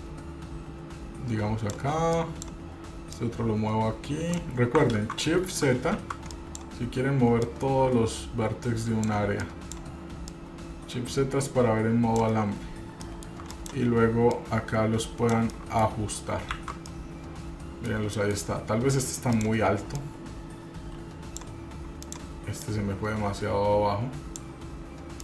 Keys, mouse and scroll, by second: 2.4 click, 3.3-4.5 drag, 5.1 ctrl+z, 6.2 shift+z, 6.5 click, 7.6-9.3 drag, 9.6 click, 10.5-12.4 drag, 12.8 scroll down 1, 13.2 shift+middle click, 13.7 click, 14.5-15.5 drag, 15.7 middle click, 16.3-16.7 scroll down 2, 16.7 shift+z, 17.1-18.1 middle drag, 18.3 middle click, 18.7 scroll up 1, 19.5 click, 20.1-21.6 drag, 22.3 click, 22.8-24.6 drag.